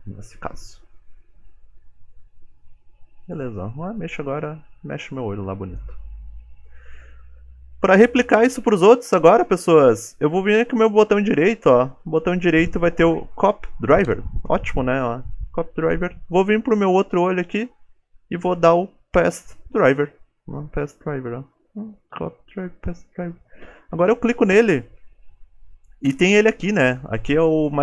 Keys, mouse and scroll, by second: 3.2 ctrl+Tab, 3.8 g, 7.4 ctrl+Tab, 7.8 click, 11.5 right click.